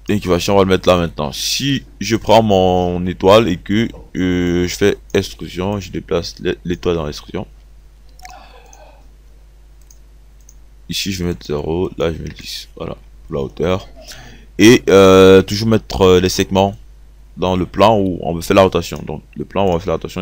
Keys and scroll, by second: 11.6 KP_0, 12.3 KP_1, 12.4 KP_0.